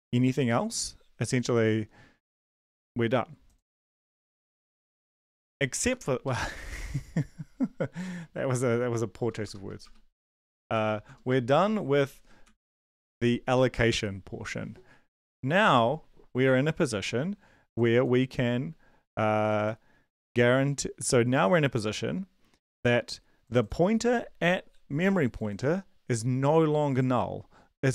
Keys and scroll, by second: 5.0 Down, 5.2 Down, 5.6 Up, 5.8 Left, 6.2 Right, 9.2 Return, 9.4 Return, 10.5 BackSpace, 10.7 BackSpace, 11.0 shift+Tab, 11.4 }, 12.4 ctrl+s.